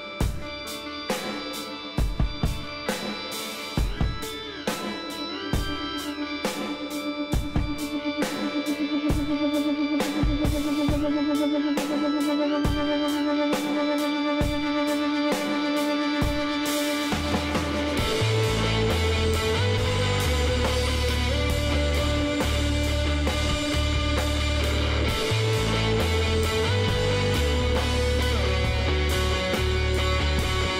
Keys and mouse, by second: 1.8-3.6 drag, 5.0 b, 6.3-9.9 drag, 8.9 b, 10.6 g, 13.3 z, 14.9-16.9 middle drag, 16.9 k, 19.5 middle click, 21.0 middle click, 22.9 k, 26.8 Tab, 28.2 Tab.